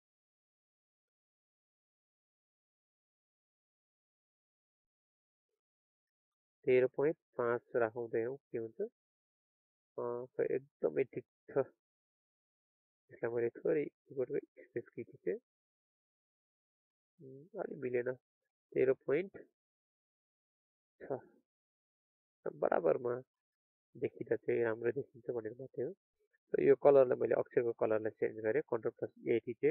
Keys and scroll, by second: 17.8 ctrl+a, 27.3 ctrl+a.